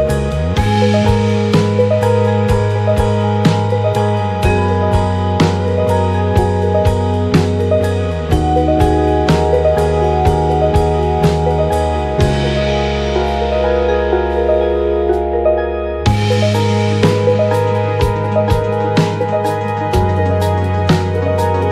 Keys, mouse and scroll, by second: 0.0 KP_1, 1.9-10.0 drag, 5.2 g, 9.4 shift+z, 10.6 click, 11.0-12.1 drag, 12.9-17.8 drag, 13.4 shift+z, 14.1 shift+z, 18.0-21.7 drag, 18.9 shift+z, 19.1 shift+z, 19.8 shift+z.